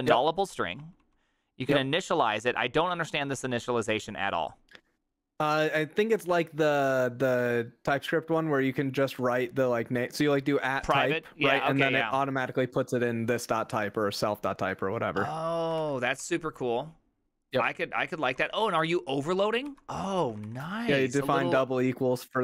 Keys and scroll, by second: 0.0-1.3 typing, 12.6-13.0 typing, 15.8 v, 16.2 ctrl+c, 17.4-21.3 typing, 19.7 ctrl+c.